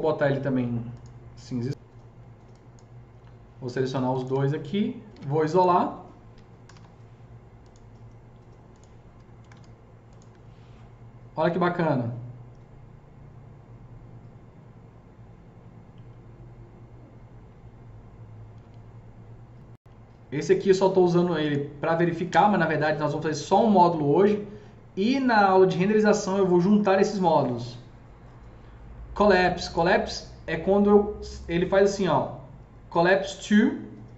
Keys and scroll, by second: 5.0 alt+q, 6.2-7.1 typing, 9.1 F3, 9.2 F3, 9.3 F4, 22.3 Delete.